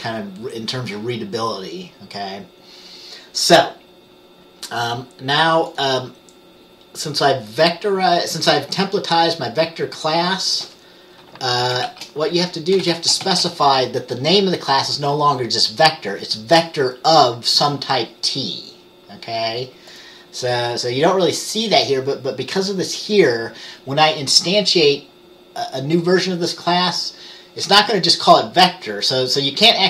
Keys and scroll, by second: 12.0-13.3 typing.